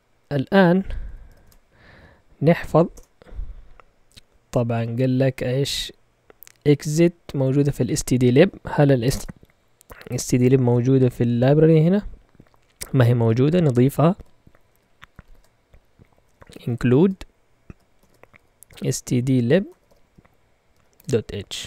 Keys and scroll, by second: 1.0 Escape, 1.4 shift+;, 2.5 x, 2.9 Return, 9.1 Return, 10.6 typing, 12.0 Down, 12.2 Down, 12.4 Down, 13.9-21.6 typing.